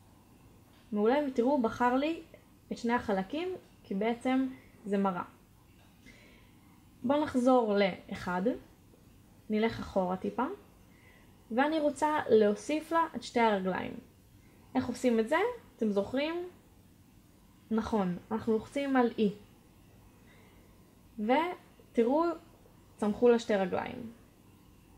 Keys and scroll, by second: 2.0 b, 10.3 1, 21.2 e.